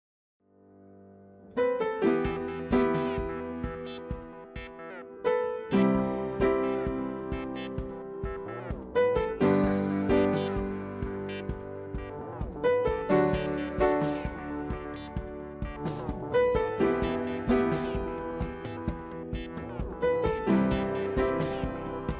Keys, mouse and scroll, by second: 0.2 ctrl+g, 3.0 shift+click, 4.8 shift+click, 7.4 shift+click, 13.7 alt+shift+click, 14.6 alt+shift+click.